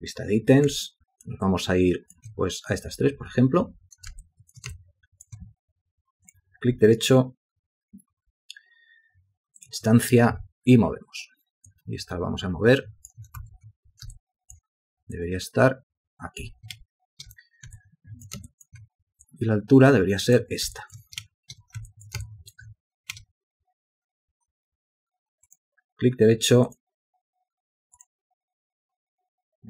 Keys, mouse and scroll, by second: 1.1 alt+shift+click, 1.7 alt+shift+click, 4.4 ctrl+alt+click, 4.9 alt+shift+click, 10.5 w, 13.6 shift+a, 14.4 ctrl+alt+click, 17.0 ctrl+space, 18.0 ctrl+alt+click, 18.7 alt+shift+click, 21.0 ctrl+alt+click, 21.4 ctrl+space, 22.1 ctrl+alt+click, 22.5 alt+shift+click, 23.3 space.